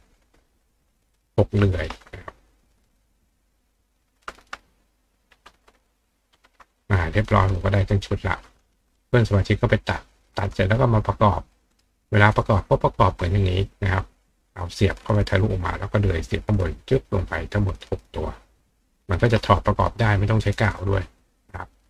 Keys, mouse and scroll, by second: 1.3 ctrl+click, 1.6 ctrl+right click, 6.8 click, 8.5-10.3 drag, 11.5 click, 11.7 right click, 12.6 click.